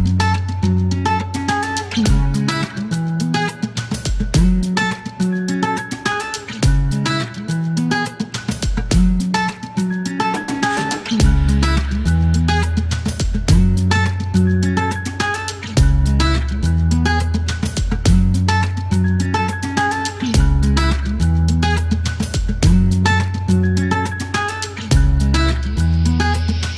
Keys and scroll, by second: 4.1-4.7 typing, 7.0 typing, 7.6 F1, 9.5 space, 18.0 alt+e, 20.1 typing, 22.5 KP_1, 22.6 Return, 24.8 typing, 26.5 KP_1, 26.6 Return.